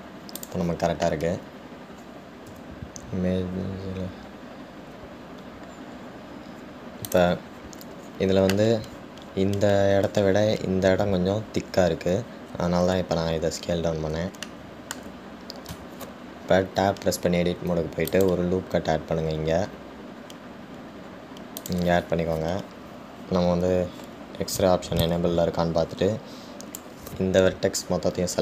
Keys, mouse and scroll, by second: 1.6 click, 2.8-3.7 scroll down 1, 3.7 s, 15.0-15.4 scroll up 1, 15.6-16.9 shift+middle drag, 16.9 Tab, 26.3 click.